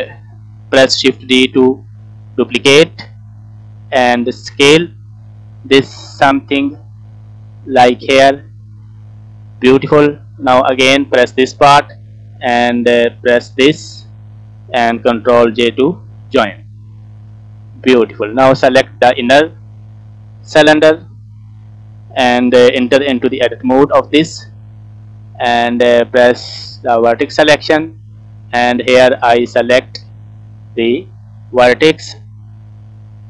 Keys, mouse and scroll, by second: 2.0 shift+d, 4.3 middle click, 5.7 s, 7.8 click, 8.2-9.6 middle drag, 10.2 middle click, 10.8 click, 13.0 shift+click, 13.6 middle click, 15.7 ctrl+j, 16.8 scroll down 1, 16.8 middle click, 17.2 scroll up 2, 17.6 middle click, 18.5 click, 19.0-19.4 scroll down 2, 19.2 middle click, 20.5 middle click, 23.2 Tab, 23.7 middle click, 24.4 scroll up 2, 24.8 scroll down 1, 24.9 middle click, 26.5 click, 27.0 middle click, 27.6-28.4 scroll up 3, 28.4 shift+middle click, 29.2 scroll up 1, 30.4 click, 32.8 alt+click.